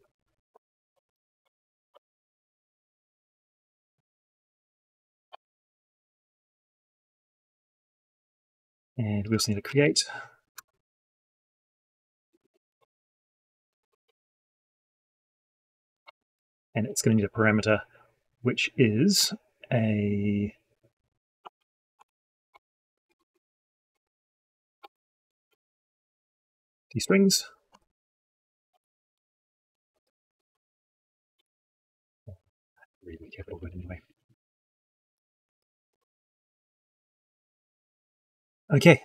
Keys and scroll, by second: 0.4 ctrl+v, 5.2 ctrl+shift+c, 28.6 ctrl+shift+c, 33.5 ctrl+shift+Up.